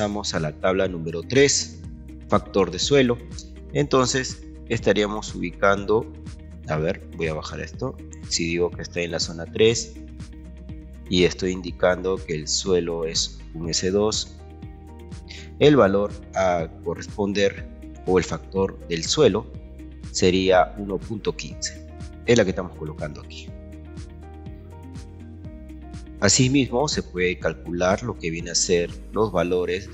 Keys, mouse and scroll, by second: 4.1 click, 4.7 click, 6.0-10.0 drag, 22.7 click, 27.9 ctrl+2, 29.2-29.9 ctrl+drag.